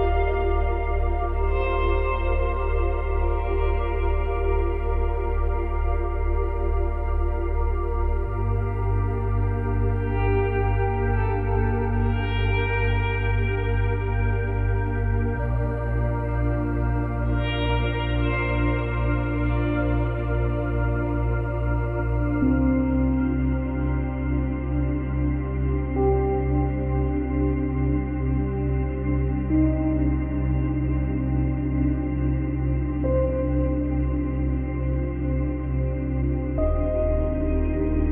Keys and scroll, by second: 1.0 space.